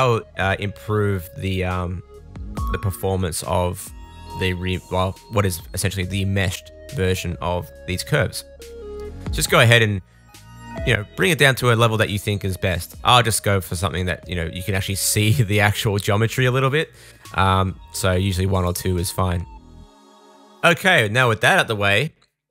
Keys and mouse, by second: 2.9 Tab, 3.8 click, 4.8-8.7 middle drag, 8.7-11.7 drag, 11.7-13.7 middle drag, 13.7-15.8 drag, 15.8-22.5 middle drag.